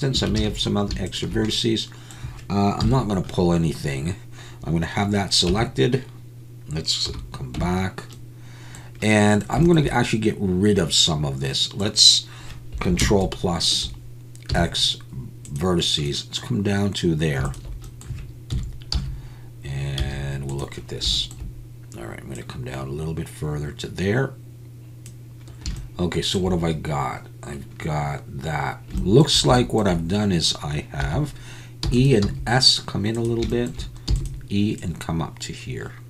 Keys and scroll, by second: 0.4 alt+a, 2.8 KP_1, 5.5 Tab, 7.1 /, 7.6 Tab, 13.0 ctrl+KP_Add, 14.5 x, 18.5 KP_1, 18.9 z, 20.0 z, 31.9 e, 32.2 s.